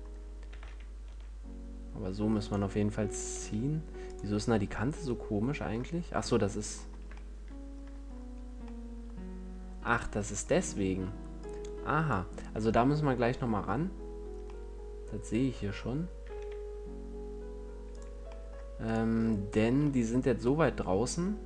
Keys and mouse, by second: 0.8 s, 3.4 s, 8.0-9.1 middle drag, 10.3-12.4 middle drag, 12.4-15.4 drag, 15.8-18.2 middle drag, 18.3 click, 18.8 click, 19.1-21.4 middle drag.